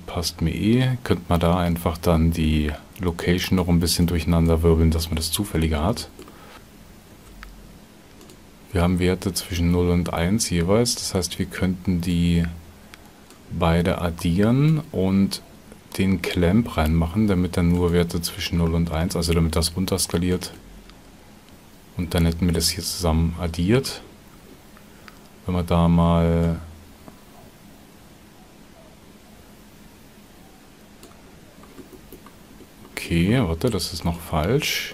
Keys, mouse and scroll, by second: 7.1 shift+d, 20.3 ctrl+shift+click.